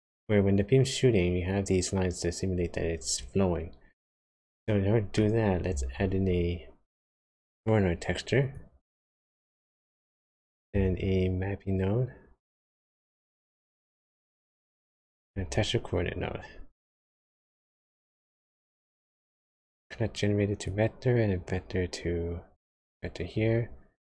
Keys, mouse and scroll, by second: 4.4 middle click, 5.9 shift+a, 10.7 shift+a, 15.2 shift+a, 19.8 click, 21.5 click, 24.0 click.